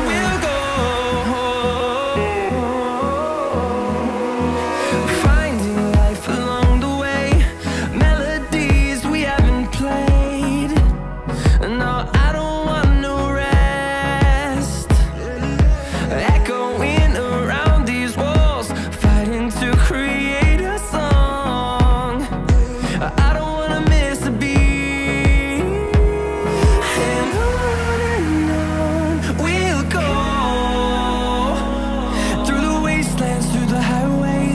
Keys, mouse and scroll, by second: 1.0 9, 1.3 Return, 7.2 2, 7.4 Return, 10.8 9, 11.0 Return, 12.8 2, 13.0 Return, 14.9 9, 15.2 Return, 16.9-18.0 scroll down 5, 17.4 Escape, 17.6 Escape, 18.0 middle click, 18.6 scroll down 1, 18.7 middle click, 18.7-19.1 scroll up 1, 21.4 scroll up 3, 21.6 scroll down 1, 21.7-22.1 scroll up 3, 22.1-22.4 scroll down 5, 22.4 middle click.